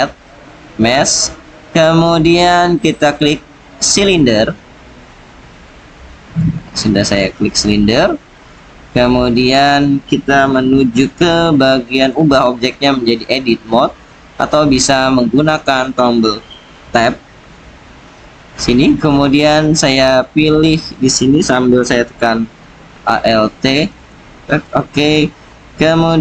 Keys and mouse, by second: 5.8-6.3 drag, 7.2-8.5 drag, 12.0-15.1 drag, 15.3 click, 16.7 Tab, 23.9 alt+click.